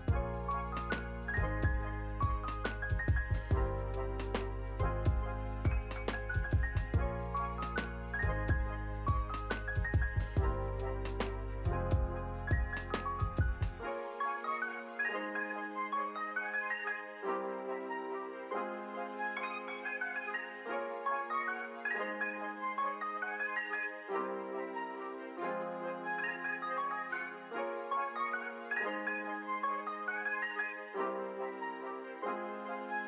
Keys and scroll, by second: 1.0 Return, 7.2 ctrl+c, 8.6 ctrl+v, 9.2 Return, 14.6 space, 19.1 space, 19.5 ctrl+s, 28.7 space.